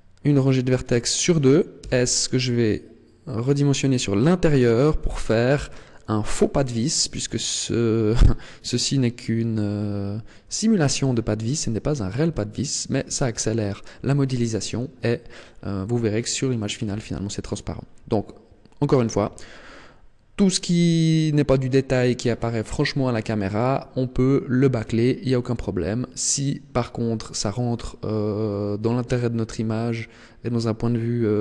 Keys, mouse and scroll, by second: 0.4 alt+shift+right click, 1.7 s, 5.2 click, 7.0 Tab, 13.6-14.6 scroll up 2, 17.0 Tab, 21.2-22.8 scroll up 1, 22.8 shift+middle click.